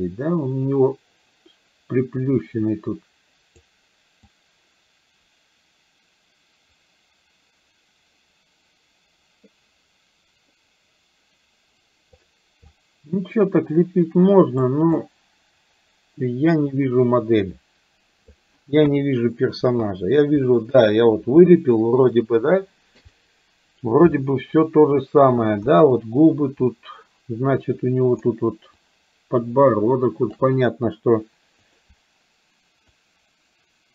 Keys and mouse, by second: 0.0-3.6 drag, 4.3-12.2 drag, 12.7-14.7 drag, 15.0-18.3 drag, 19.0 KP_1, 28.8-30.5 ctrl+drag, 31.7 click, 33.0-33.9 ctrl+drag.